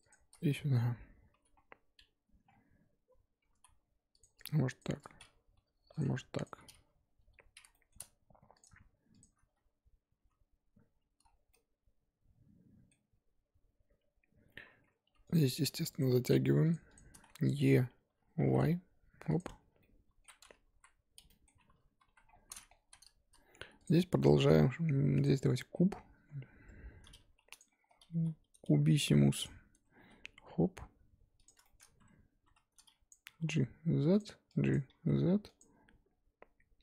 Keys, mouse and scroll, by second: 0.1 shift+click, 1.3 j, 2.5-3.5 scroll down 4, 3.5 ctrl+z, 3.8-4.2 scroll up 2, 4.2 click, 4.8 shift+click, 5.5 j, 6.0 click, 6.4 shift+click, 7.2 j, 7.7 shift+middle click, 8.6 click, 9.2 shift+click, 10.2 j, 11.2-11.5 scroll down 3, 11.5-13.1 middle drag, 13.1 Tab, 14.3 scroll up 4, 14.5 Tab, 15.0 2, 15.2 click, 16.9-18.4 shift+drag, 18.4 e, 19.4 Tab, 19.6 scroll down 4, 19.8-22.1 middle drag, 22.1 KP_1, 22.3-22.9 scroll down 1, 22.9 z, 23.8 click, 23.9-24.3 scroll up 2, 25.2 shift+a, 25.5-26.1 scroll down 14, 26.1 Tab, 26.4 scroll up 3, 26.5 Tab, 27.2 g, 27.7-28.1 scroll up 7, 28.1 g, 29.5 scroll up 2, 29.7 Tab, 30.0 s, 31.6 shift+middle click, 31.8-32.4 scroll up 2, 32.4 1, 33.1 click, 33.2 g, 34.7 click, 34.9 g, 35.7-36.8 scroll up 2.